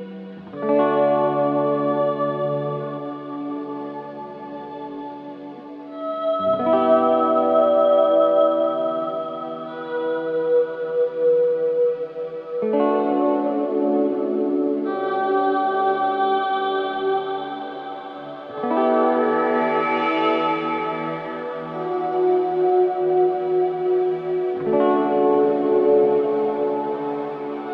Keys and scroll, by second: 0.7 v, 13.4 a, 15.4 v, 16.8 r, 18.9 ctrl+z, 20.1 v, 25.2 |, 26.4 space, 27.0 ctrl+v.